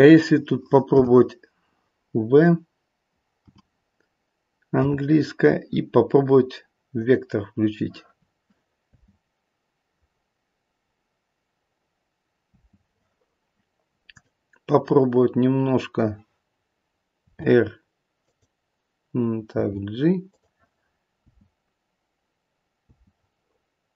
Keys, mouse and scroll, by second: 0.8 n, 3.4 n, 4.7 v, 8.8 space, 12.5 space, 14.0 click, 17.2 r, 19.4 g, 21.2 space, 22.8 space.